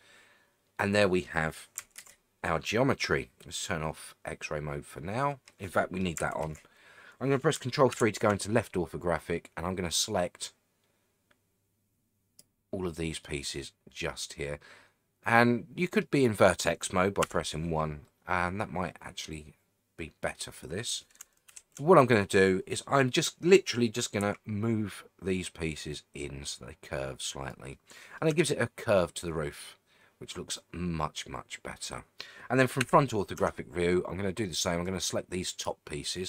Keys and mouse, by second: 2.0 alt+z, 4.1-6.0 middle drag, 6.4 alt+z, 7.9 ctrl+KP_3, 10.0-12.4 drag, 13.2-16.0 middle drag, 17.2 1, 18.0-21.0 middle drag, 21.5 ctrl+KP_3, 24.2 g, 27.3 click, 27.7 middle click, 28.3 Tab, 28.6-32.2 middle drag, 32.8 KP_1, 33.4 Tab, 34.8 click.